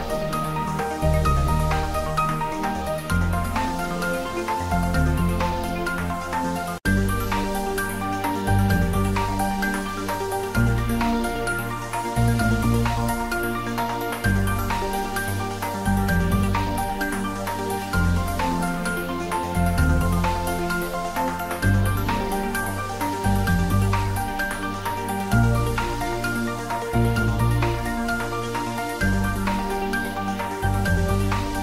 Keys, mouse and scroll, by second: 0.3-1.2 typing, 2.1 click, 2.4 ctrl+s, 3.0 middle click, 4.1 ctrl+middle click, 5.0 ctrl+s, 6.4 click, 6.9 ctrl+middle click, 7.8 ctrl+s, 9.8-11.6 shift+middle drag, 13.8 shift+middle click, 14.6 ctrl+middle click, 16.1 ctrl+shift+middle click, 16.5 ctrl+middle click, 17.2 click, 17.8 Tab, 18.3 middle click, 20.2 ctrl+middle click, 21.3 shift+z, 21.8 click, 22.7 ctrl+middle click, 23.2 shift+z, 23.9 g, 25.2 y, 27.5 click, 27.6 Tab, 28.0 ctrl+middle click, 28.9 middle click, 29.6-31.0 ctrl+middle drag, 31.0 click.